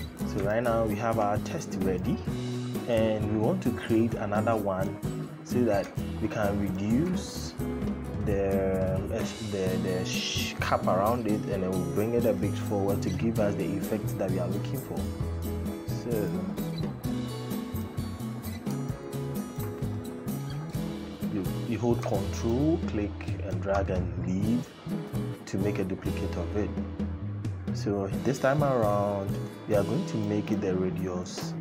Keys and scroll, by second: 31.5 KP_1.